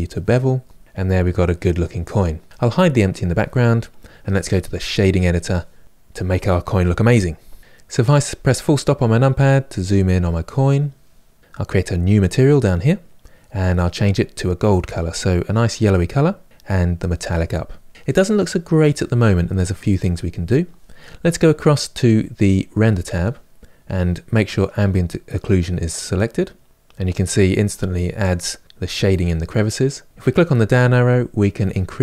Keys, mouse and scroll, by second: 0.8-2.4 middle drag, 2.8 click, 4.9-5.7 drag, 7.7 KP_Decimal, 8.4-11.8 middle drag, 11.8-15.4 drag, 16.6-24.4 drag, 31.5-32.0 drag.